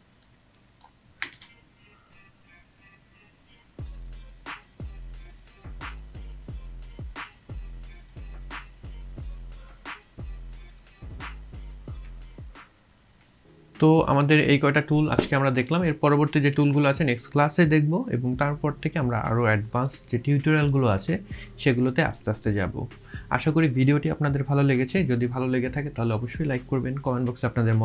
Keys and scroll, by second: 1.3 space.